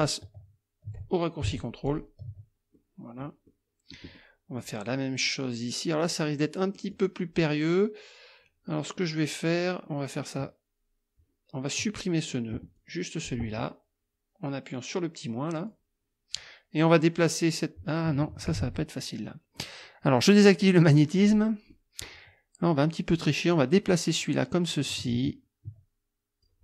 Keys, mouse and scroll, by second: 1.9 ctrl+click, 2.7 ctrl+click, 3.5 click, 4.2 click, 5.3 click, 6.7 click, 12.8 click, 15.6 click, 18.6 ctrl+z, 20.6 click, 21.2 click, 21.7 click, 23.5-26.6 drag.